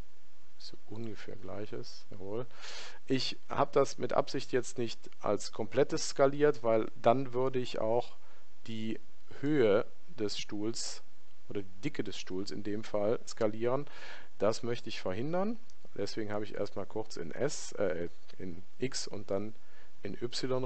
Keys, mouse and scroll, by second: 8.6-16.0 middle drag.